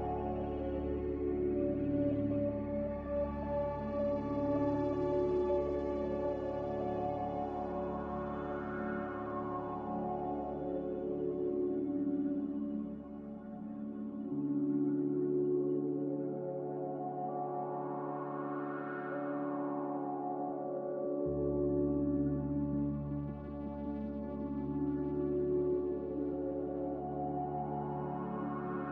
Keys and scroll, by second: 5.9 b, 17.6 x, 19.4 z, 21.8-22.9 typing, 23.2 Return, 26.2 n.